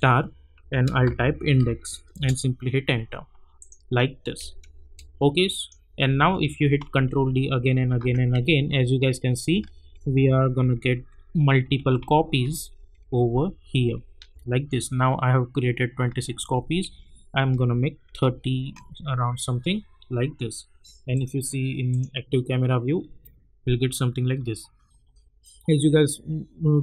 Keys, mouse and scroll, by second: 0.6-1.5 typing, 2.1 Return, 3.6 click, 4.2 space, 5.6 click, 6.5 ctrl+d, 8.4-9.1 alt+scroll up 1, 9.6 ctrl+d, 14.6 scroll down 1, 16.3 ctrl+d, 18.8-20.7 scroll down 1, 21.1 click, 22.9 scroll down 1.